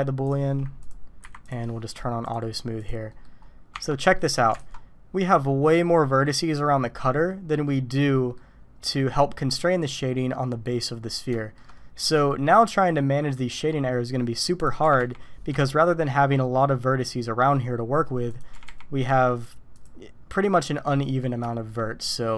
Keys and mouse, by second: 0.2 click, 1.2 Delete, 2.3 click, 2.8 click, 3.1 click, 3.7 Tab, 4.1 click, 4.6 alt+a, 7.6 middle click, 8.9 middle click, 11.4 shift+middle click, 12.1 click, 14.8 g, 18.3 click, 18.5 g, 21.5 shift+middle click.